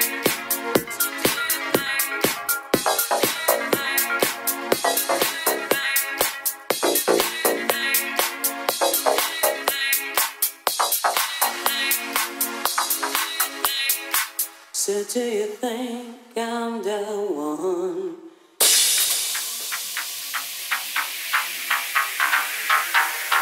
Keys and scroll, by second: 1.0 super+c, 1.1 super+v, 1.5 Right, 6.9 super+v, 7.4 Right, 7.8 Left, 9.6 Down, 10.4 Right, 11.2 Right, 11.5 Left, 11.6 Right, 12.0 Right, 12.3 Left, 14.9-15.8 typing, 18.7-19.5 typing, 20.3 Up, 20.5 Down, 22.0 Up, 22.2 Down, 22.3 Right, 22.4 Up, 22.6 Right.